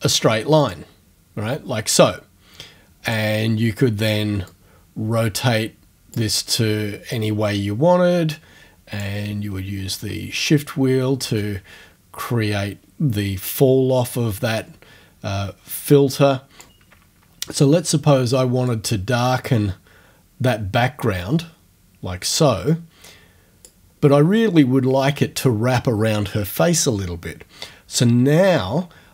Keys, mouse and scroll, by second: 0.6 click, 3.1 click, 4.5-6.4 drag, 7.2-9.2 drag, 9.4-10.2 shift+scroll up 1, 10.2-10.6 shift+scroll up 1, 13.5-16.8 drag, 18.7-23.8 drag.